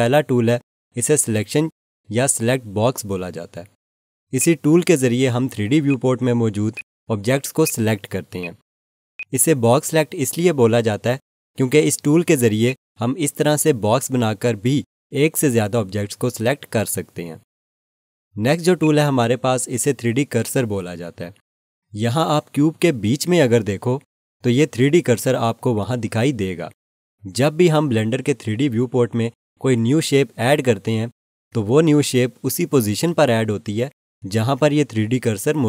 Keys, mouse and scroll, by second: 4.3 click, 12.6 click, 18.8 click.